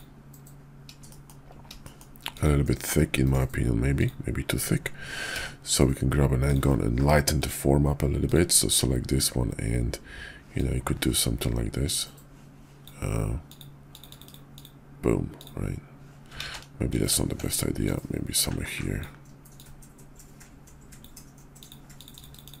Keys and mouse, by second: 1.0 shift+click, 1.7 shift+drag, 2.3-3.9 drag, 4.0 click, 5.3 d, 7.3 click, 8.2 click, 10.5-12.8 drag, 16.3 ctrl+z, 17.3 ctrl+z, 17.8-19.0 drag, 19.5-21.0 drag.